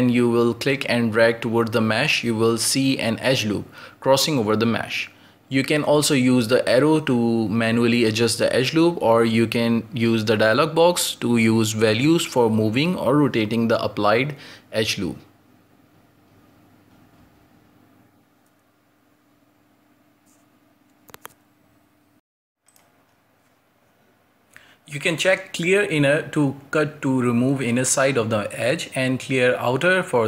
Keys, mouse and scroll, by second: 4.7 drag, 9.0 click, 10.9-25.5 drag, 25.5-26.9 middle drag, 26.9 click, 27.4 click, 27.7-29.3 middle drag, 29.3 click, 30.1-30.2 middle drag.